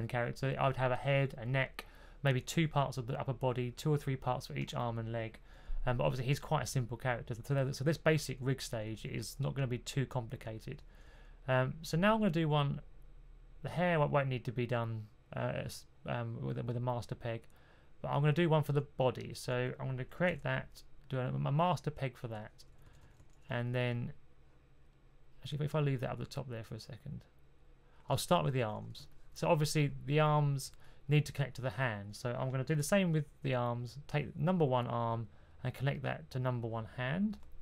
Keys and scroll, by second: 8.4 typing, 10.4-11.1 typing, 20.2 super+p, 22.8 typing, 28.1-28.8 typing, 32.7 super+p.